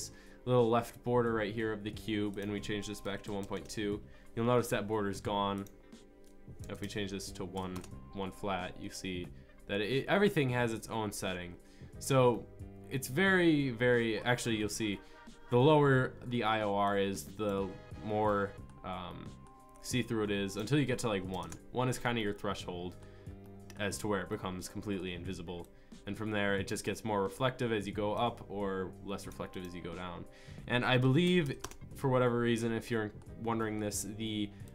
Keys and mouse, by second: 5.5-10.8 middle drag, 16.8 middle click, 25.7 middle click.